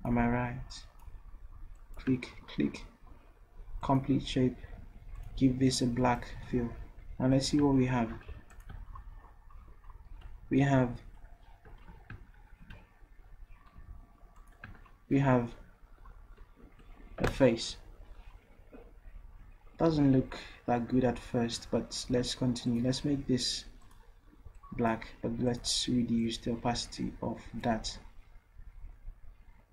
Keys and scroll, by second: 8.3 ctrl+v, 11.9 ctrl+z, 12.6 ctrl+z, 13.8 v.